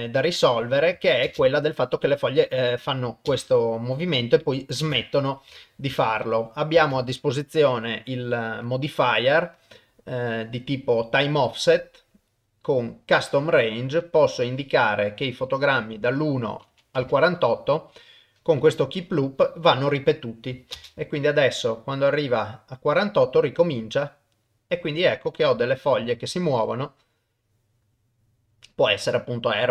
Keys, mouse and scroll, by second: 1.3 shift+space, 2.4 click, 3.3 shift+space, 4.8 shift+space, 5.9 ctrl+Tab, 7.0 ctrl+s, 8.6 click, 9.6-11.4 drag, 13.2-14.1 drag, 16.2 click, 19.9 click, 20.7 shift+space, 24.8 middle click, 26.5-27.5 middle drag, 28.7 middle click.